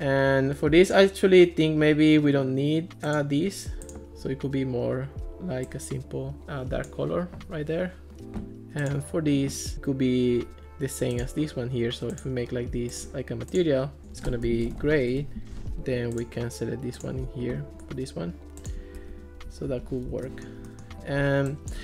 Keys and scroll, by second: 14.4-15.3 typing, 19.0 Escape, 19.7 alt+r.